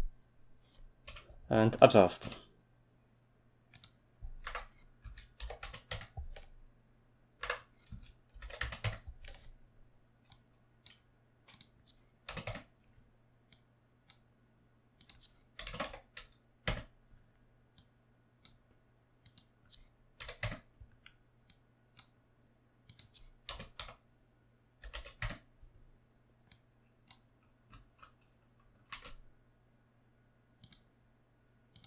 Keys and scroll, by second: 1.0 g, 2.2 s, 4.4-5.9 typing, 7.0-8.8 typing, 12.0-12.8 typing, 15.6-16.6 typing, 19.9-20.6 typing, 23.2-25.3 typing, 28.6-29.3 typing.